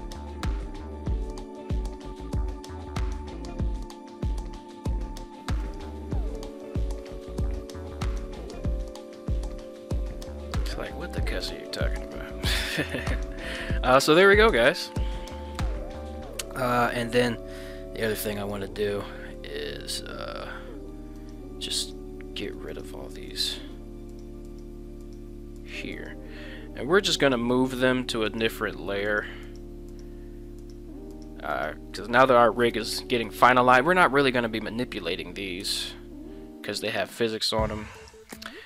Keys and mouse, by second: 1.6 g, 3.0 click, 4.0 g, 5.7 click, 8.1 a, 8.2 a, 8.5-12.0 middle drag, 12.1 a, 12.9 alt+g, 13.2 alt+r, 13.9 middle click, 15.5 KP_1, 16.4 middle click, 16.9 middle click, 18.8-19.4 middle drag, 19.6-20.5 middle drag, 21.4 shift+right click, 21.9 shift+right click, 22.8 right click, 23.4 right drag, 24.2 shift+right click, 24.6 shift+right click, 25.1 shift+right click, 25.8 shift+right click, 27.3 shift+right click, 27.5 shift+middle click, 28.5 shift+right click, 30.0 shift+right click, 35.6 m.